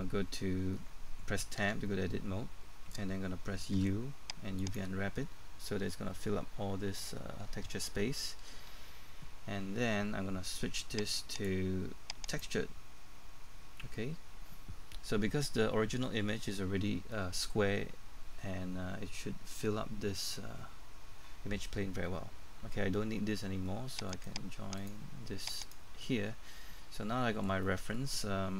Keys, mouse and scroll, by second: 1.6 Tab, 3.7 u, 4.6 click, 13.1-13.8 scroll up 1, 24.1 right click, 24.8 click, 26.2-27.0 scroll down 1, 27.0 middle click.